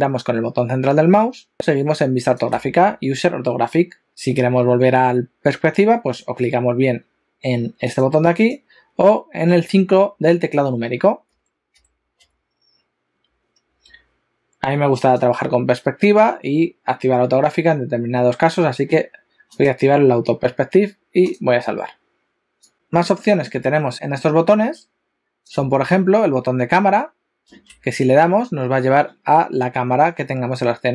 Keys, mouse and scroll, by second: 0.9 middle click, 7.9 click, 8.3 click, 11.3 KP_5, 11.8 KP_5, 12.2 KP_5, 13.7 F4, 30.1-30.9 scroll down 5.